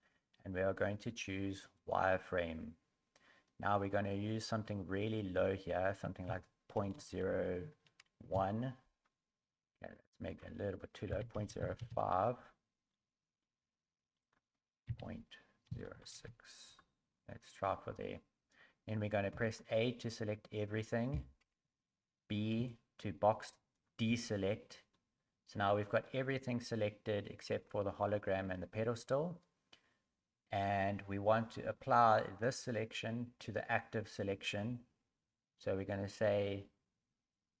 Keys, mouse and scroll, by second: 3.7 click, 10.3 click, 12.8 scroll up 4, 14.2 click, 17.1 scroll down 4, 19.3 a, 20.1 scroll down 4, 21.1 b, 24.9 scroll up 3, 26.3 scroll up 1, 27.4 scroll down 2, 29.0 scroll up 1.